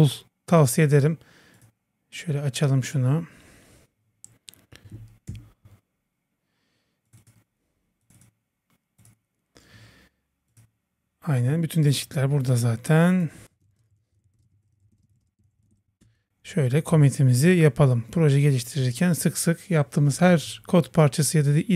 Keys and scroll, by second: 5.3 super+o, 16.0 super+Return.